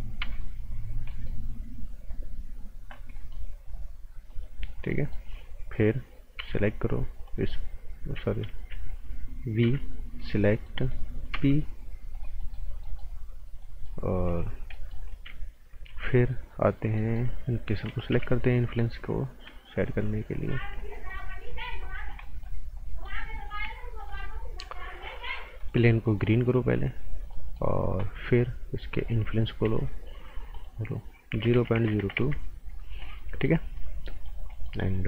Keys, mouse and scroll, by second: 0.2 p, 0.9-1.4 scroll up 2, 1.1 right click, 2.0 scroll down 1, 2.6 scroll up 1, 3.1 right click, 4.3 click, 4.7 scroll down 1, 4.9 right click, 5.3-6.3 scroll up 1, 6.3 p, 7.2 click, 8.5 ctrl+z, 9.3-10.1 typing, 10.2 click, 10.5 scroll down 1, 10.6 right click, 11.3 p, 12.1 click, 12.4 right click, 14.5 scroll down 1, 14.7 right click, 15.9 z, 16.9 right click, 18.1 b, 18.4 scroll up 1, 19.7 shift+click, 20.4 click, 20.7 scroll down 1, 20.9 right click, 22.0 scroll down 1, 22.2 right click, 22.6 scroll up 1, 22.8 right click, 23.2 scroll up 1, 24.0 click, 24.3-25.6 scroll down 1, 25.6 click, 27.1 scroll down 1, 27.3 right click, 29.6 s, 30.5 click, 31.3 KP_0, 31.5 KP_Decimal, 31.7 KP_0, 32.1 KP_Enter, 32.8 scroll down 1, 33.0 right click, 33.5 scroll up 1, 33.7 right click, 34.7 scroll up 1, 34.9 right click.